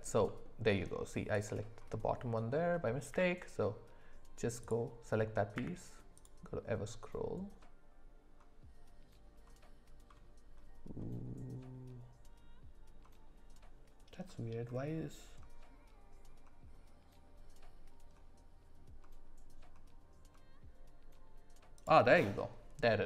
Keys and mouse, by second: 0.2 middle click, 1.3 click, 3.1 q, 4.6 click, 5.5 q, 22.8 middle click.